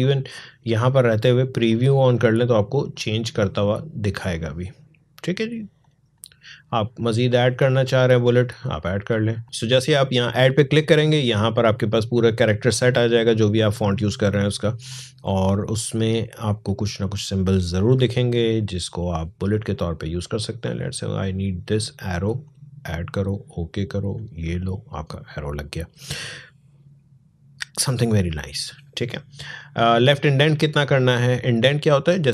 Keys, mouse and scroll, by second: 9.2-20.4 drag.